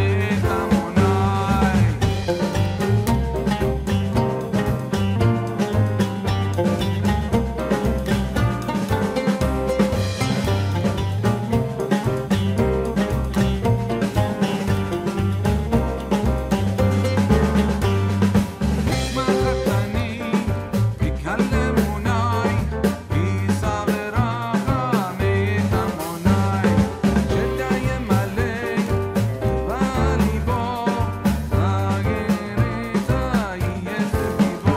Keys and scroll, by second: 9.3 ctrl+t, 13.7 Return, 20.5 ctrl+g, 23.1 ctrl+t, 26.6 ctrl+z, 27.7 Return, 28.9 ctrl+t.